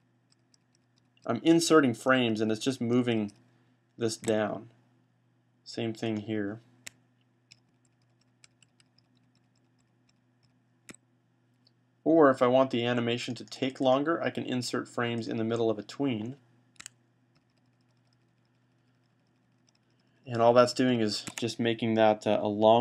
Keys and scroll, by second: 0.4 F5, 0.6 F5, 0.8 F5, 1.1 F5, 1.4 F5, 1.9 F5, 2.8 F5, 7.4 F5, 7.9 F5, 8.9 F5, 9.5 F5, 17.2 F5, 18.0 fn+F5, 18.7 fn+F5, 19.1 fn+F5, 19.6 fn+F5, 19.7 fn+F5.